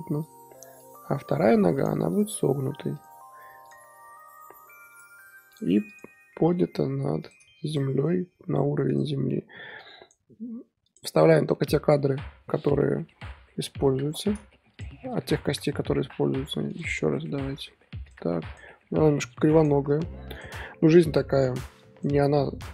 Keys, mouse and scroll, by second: 0.8 click, 1.4 r, 2.1 click, 2.3 r, 3.6 click, 3.8 r, 5.5 click, 5.9 click, 6.3 g, 7.7 click, 8.0 r, 9.8 click, 10.8 shift+click, 11.5-13.0 middle drag, 13.0 i, 13.6 KP_1, 14.7 drag, 15.1 r, 16.7 click, 17.2 r, 18.5 drag, 19.5 click, 19.9 r, 21.8 click.